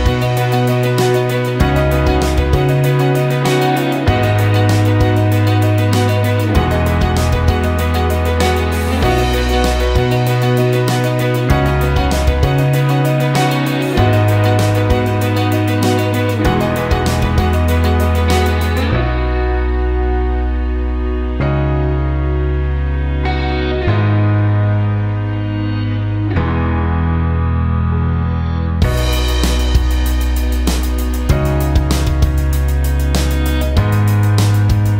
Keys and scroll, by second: 0.0-0.4 typing, 14.8 ctrl+space, 19.9-23.5 typing, 23.7 ctrl+space.